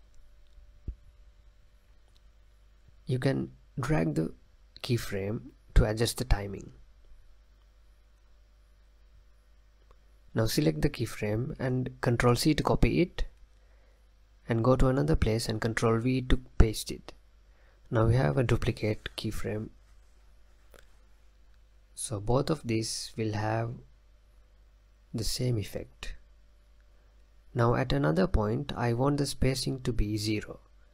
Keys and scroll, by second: 5.3 space, 8.1 space, 13.1 ctrl+c, 16.6 ctrl+v, 19.9 space.